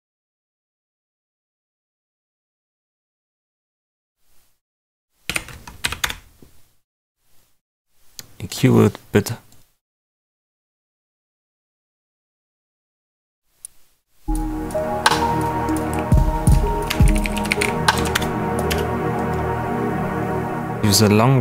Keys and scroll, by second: 4.8-5.7 typing, 5.8 Down, 6.0 Return, 13.5 space, 15.9-18.6 typing, 18.1 Return.